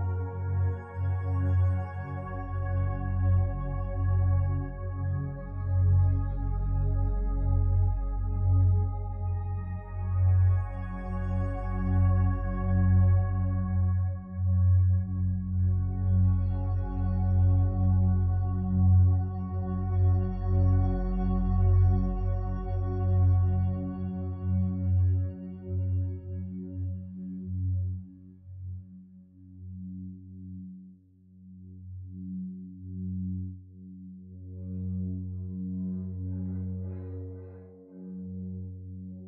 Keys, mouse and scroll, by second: 3.3 Return, 26.6 d, 26.8 o, 27.0 m, 27.2 e, 32.0 5, 32.2 Return.